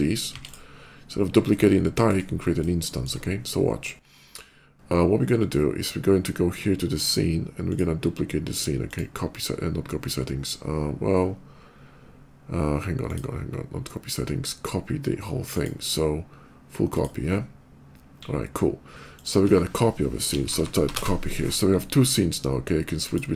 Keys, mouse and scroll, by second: 0.0 click, 0.2 x, 0.3 click, 1.5 shift+middle click, 2.6 shift+middle click, 7.4 click, 8.6 click, 12.9 click, 15.3 click, 16.6 click, 18.8 click, 20.2 c, 20.4 o, 20.4 p, 20.7 y, 20.8 Return, 22.8 click.